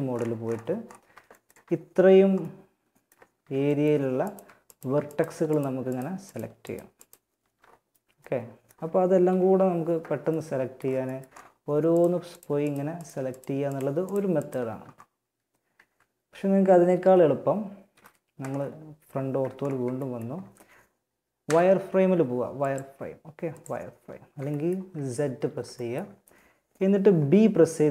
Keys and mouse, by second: 2.5 z, 8.6 KP_1, 11.1-16.1 middle drag, 14.9 a, 16.1 KP_3, 17.1 KP_1, 20.7 z, 21.8-23.7 drag, 27.2 b.